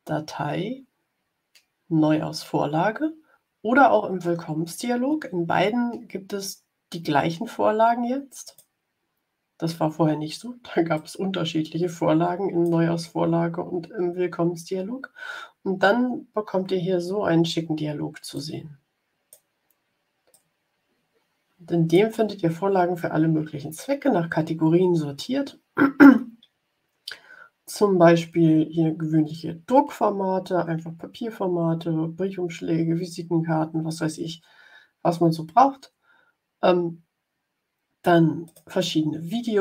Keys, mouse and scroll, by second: 8.3 click, 10.9-12.8 drag, 18.2-19.4 drag, 20.2-22.0 drag, 38.4 click.